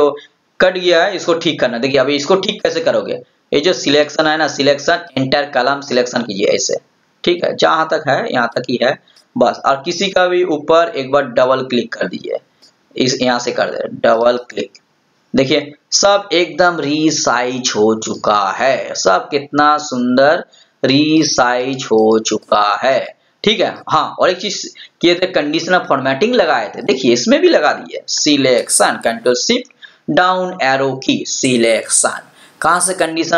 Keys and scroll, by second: 29.4 ctrl+shift+Down.